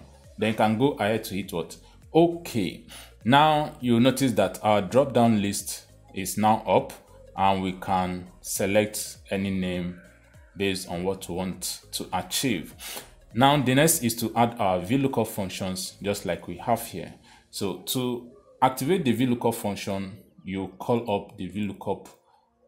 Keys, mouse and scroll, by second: 2.1 click, 4.7 click, 5.7 click, 7.2 click, 8.5 click, 9.8 click, 11.1 click, 12.4 click, 15.5 click, 16.5 click, 17.5 click, 20.2 click, 20.2 typing, 21.3-22.0 typing.